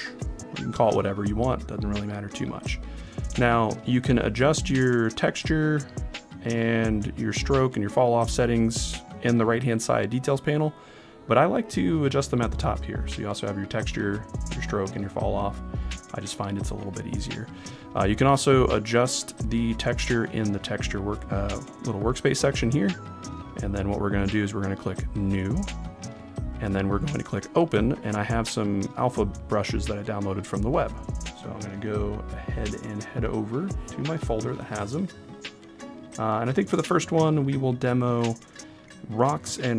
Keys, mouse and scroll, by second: 4.8 click, 6.3 click, 7.4 click, 8.4 click, 13.1-16.9 drag, 22.4 click, 25.4 click.